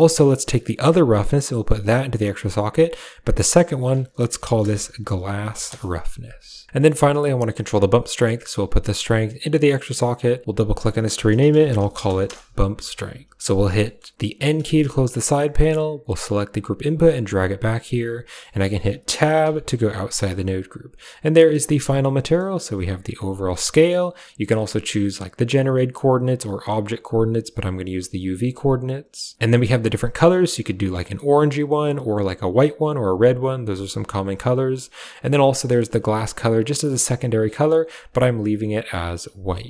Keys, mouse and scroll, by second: 1.0-2.0 drag, 2.7-5.6 drag, 6.7 middle click, 8.5-9.2 drag, 10.2-12.2 drag, 13.3 middle click, 13.7 middle drag, 14.3 n, 14.6 middle drag, 15.9 click, 16.6 g, 18.3 middle click, 19.3 Tab, 20.4 click, 21.1 click, 21.7 shift+middle click, 22.3-23.4 drag, 23.6 middle click, 24.2 click, 24.9-25.4 drag, 26.0 click, 26.9-27.3 drag, 27.7 drag, 27.8 typing, 29.3 Tab, 29.3 click, 35.1 click.